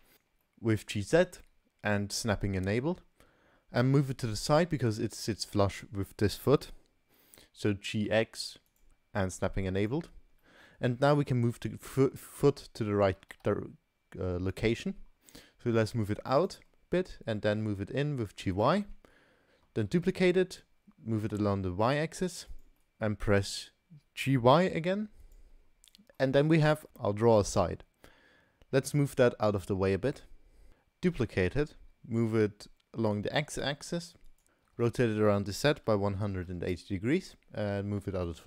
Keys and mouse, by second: 0.1 g, 0.4 middle drag, 0.9 middle click, 7.9 g, 9.2-9.6 middle drag, 9.8 click, 10.4-10.8 middle drag, 11.8-12.2 middle drag, 13.2 g, 16.4 middle click, 16.7 click, 16.7 right click, 17.2 g, 18.8-19.2 drag, 18.8-19.2 right drag, 19.9 shift+d, 22.8 click, 24.5 g, 25.7 drag, 26.2-26.6 drag, 28.9 g, 31.2 shift+d, 34.8 r, 37.7 g.